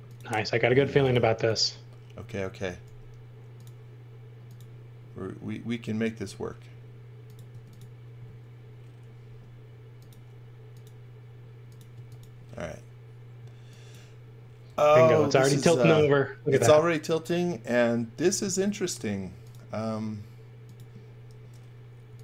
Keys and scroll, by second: 1.2 space, 2.8 r, 7.5 space, 9.3 r, 11.9 space, 14.4-15.4 typing, 18.3 m, 22.1 x.